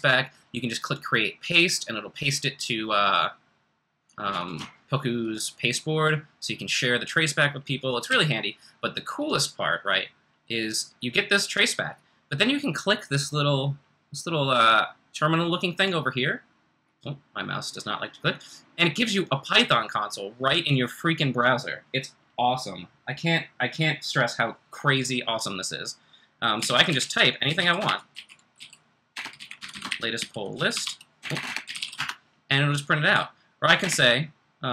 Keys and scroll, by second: 8.1 d, 26.4-32.3 typing, 33.6-34.7 typing.